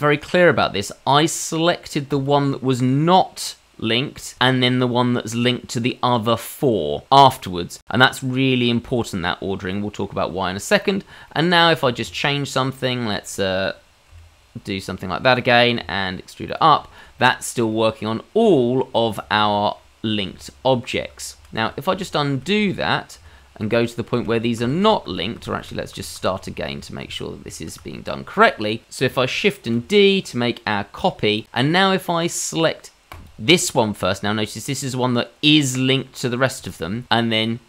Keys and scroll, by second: 12.0 Tab, 14.1 i, 15.8 e, 21.3 ctrl+z, 21.6 ctrl+z, 21.9 ctrl+z, 22.3 ctrl+z, 22.6 ctrl+z, 23.1 ctrl+z, 23.6 ctrl+z, 24.1 ctrl+z, 24.6 ctrl+z, 24.8 ctrl+z, 25.1 ctrl+z, 25.4 ctrl+z, 25.6 ctrl+z, 25.9 ctrl+z, 26.1 ctrl+z, 26.4 ctrl+z, 26.7 ctrl+z, 27.0 ctrl+z, 27.4 ctrl+z, 29.7 shift+d.